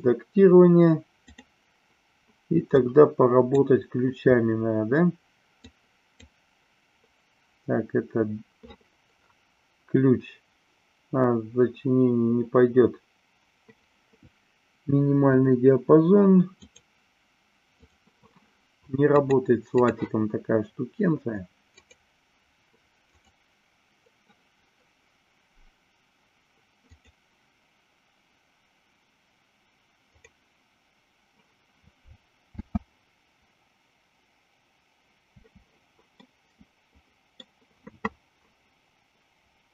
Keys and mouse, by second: 1.3 click, 2.7 click, 5.7 click, 16.5 click, 17.7 click, 19.3 click, 23.1 click, 26.9-30.3 drag, 32.5 space, 36.1-37.4 middle drag.